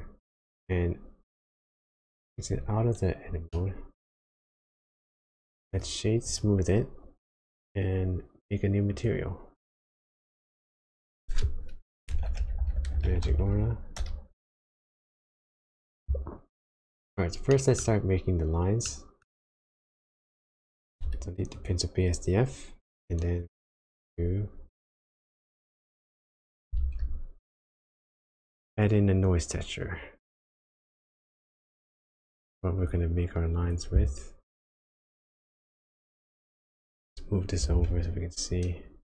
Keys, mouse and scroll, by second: 2.5 Tab, 3.5 middle click, 5.7 right click, 9.6 click, 17.0-17.6 scroll down 2, 17.6 shift+middle click, 18.8 middle click, 19.6 click, 21.1 x, 21.6 click, 26.5 click, 26.8-27.1 shift+scroll down 1, 26.8 shift+a, 35.6 click, 37.6 g.